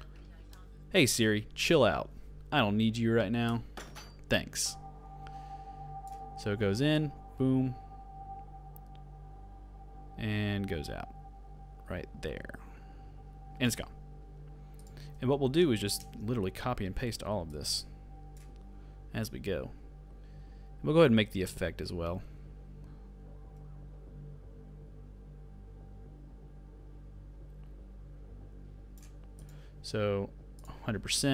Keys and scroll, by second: 16.1 alt+].